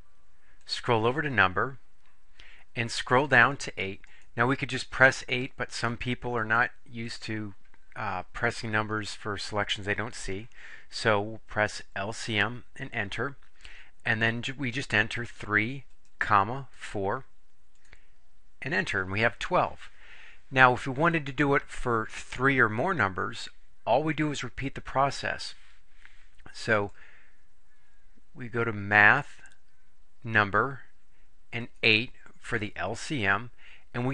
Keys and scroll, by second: 0.7 Right, 3.4 Down, 4.2 Down, 4.7 Down, 5.3 Down, 6.1 Down, 6.7 Down, 7.2 Down, 11.8 Return, 14.9 3, 16.1 ,, 16.8 4, 17.8 Return, 29.1 Right, 31.7 8.